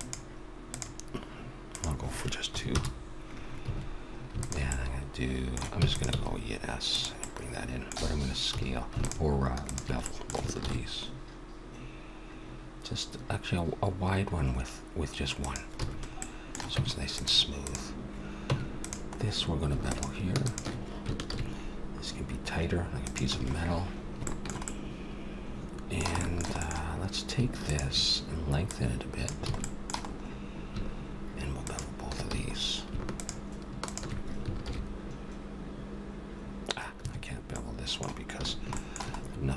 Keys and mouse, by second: 1.7-3.5 drag, 3.6 a, 4.4-6.1 drag, 5.0 middle click, 5.7 e, 5.9 middle click, 6.1 s, 8.5 a, 9.0-11.6 drag, 10.6 ctrl+b, 15.8 a, 16.8 Tab, 17.6-19.5 drag, 18.5 Tab, 19.8 click, 21.2 ctrl+b, 23.3 a, 25.3 middle click, 27.6-30.4 drag, 29.5 a, 30.4-31.6 middle drag, 31.6-35.4 drag, 32.3 a, 34.6 ctrl+b, 37.5 middle click, 38.4 a, 39.1 middle click.